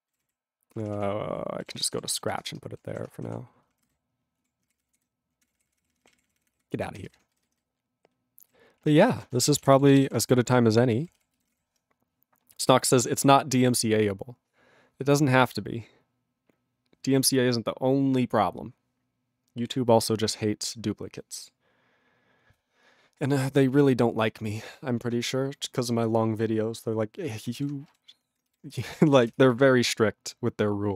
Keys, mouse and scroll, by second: 0.2 ctrl+a, 0.2 ctrl+n, 0.7 ctrl+p, 0.9 ctrl+p, 0.9 ctrl+e, 2.5 Return, 3.0 alt+>, 3.3 ctrl+o, 3.7 ctrl+p, 3.9 ctrl+y, 4.4 ctrl+a, 4.6 ctrl+o, 4.7 ctrl+n, 4.8 ctrl+o, 4.9 ctrl+n, 5.4 ctrl+o, 5.5-6.1 ctrl+o, 6.3 ctrl+o, 6.5 ctrl+o, 6.6 ctrl+p, 7.1 alt+<, 7.4-8.4 ctrl+n, 8.8 ctrl+e, 8.9 ctrl+b, 9.1 ctrl+BackSpace, 9.2-10.6 typing, 10.8 ctrl+p, 10.8 ctrl+b, 10.9 ctrl+p, 11.0 ctrl+b, 11.3 ctrl+b, 11.5 ctrl+p, 27.9 ctrl+g, 28.8 Return, 29.4 Return.